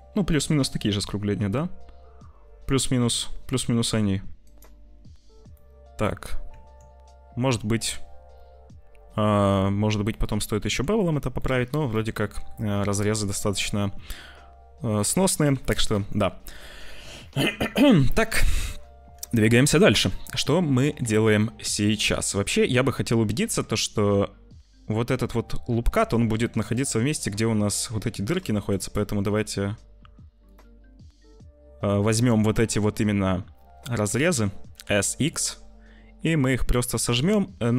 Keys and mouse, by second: 0.3 middle click, 2.7 middle click, 4.3 click, 5.6 click, 6.4 Tab, 10.1 click, 10.5 Tab, 11.4 click, 11.6 middle click, 12.8 Tab, 13.4 click, 15.5 ctrl+s, 15.8 Tab, 19.3 ctrl+s, 19.6 click, 20.7 click, 21.0 Tab, 21.3 click, 22.0 z, 23.4 Tab, 25.8 `, 26.5 shift+middle click, 27.6 Tab, 27.9 2, 28.1 click, 28.8 alt+shift+click, 30.4 alt+shift+click, 34.5 s.